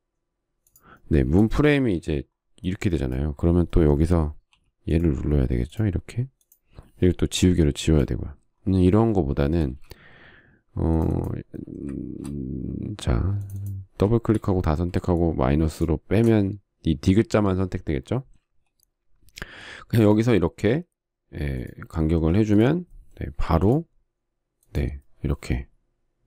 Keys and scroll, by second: 2.0 space, 5.2 p, 8.1 e, 10.3 space, 20.2 f, 23.1 space, 24.2 p.